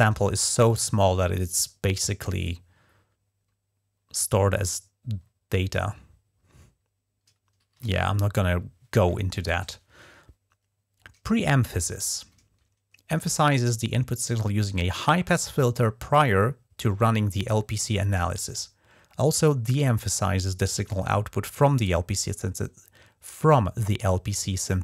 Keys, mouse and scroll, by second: 8.2 ctrl+`, 10.4-10.8 scroll down 2.